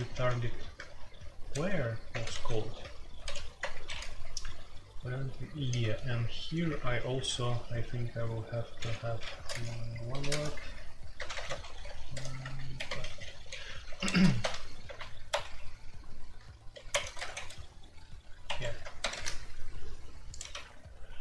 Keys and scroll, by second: 0.0-3.2 typing, 3.6 Return, 5.1-7.6 typing, 9.0-17.1 typing, 16.9 Tab, 18.4 Escape, 18.5 F2, 19.0 ctrl+c, 19.1 ctrl+c, 20.5 q.